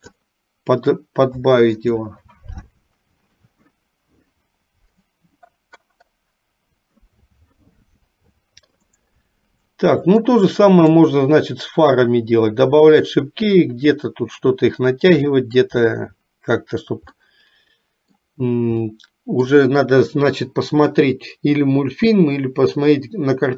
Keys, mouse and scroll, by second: 1.9 click, 10.3 middle click, 15.3 middle click, 17.1 middle click, 18.8 middle click.